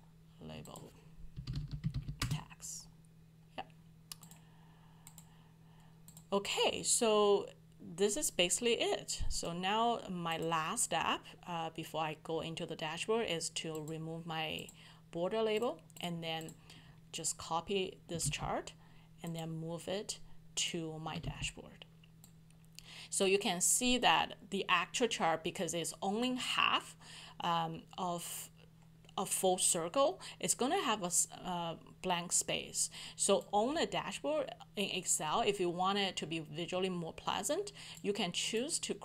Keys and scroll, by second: 18.2 ctrl+c, 21.2 ctrl+v.